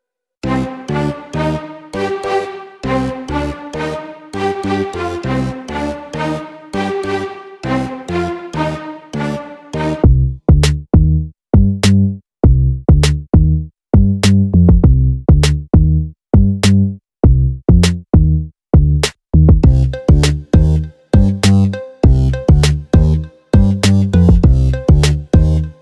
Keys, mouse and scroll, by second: 0.1 click, 5.3 click, 6.3 click, 7.0 click, 7.8 click, 8.7 click, 9.2 click, 10.3 click, 10.7 click, 12.1 click, 15.4 click, 15.8 click, 17.4 ctrl+alt+shift+e, 19.0 click, 19.4 click, 21.0 click, 22.4-23.8 drag, 23.9-24.4 drag, 24.6-25.3 drag, 25.5-25.8 drag.